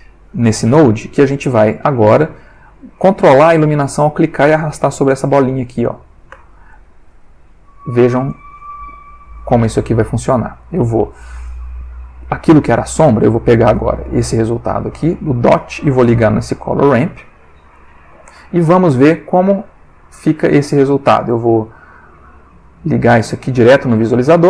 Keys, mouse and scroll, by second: 1.7 click, 3.0-6.9 drag, 6.3 Escape, 7.2-8.2 drag, 9.2 click, 10.6 click, 11.4-12.2 drag, 13.7-14.5 drag, 15.0-17.3 drag, 17.7-18.3 drag, 18.9 middle click, 19.5 ctrl+middle click, 20.5 click, 20.9 middle click, 21.3 click, 22.8-24.4 drag.